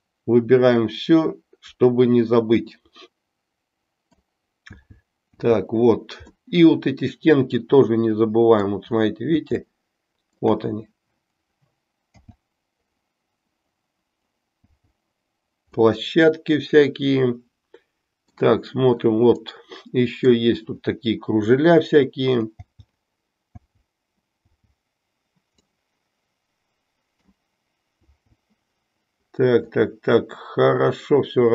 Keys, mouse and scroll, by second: 4.8 l, 6.5-8.7 middle drag, 9.6 shift+middle click, 12.1 l, 16.1-18.5 middle drag, 19.7 middle click, 22.6 l, 25.8-27.5 middle drag, 28.3 l, 29.9-31.5 middle drag.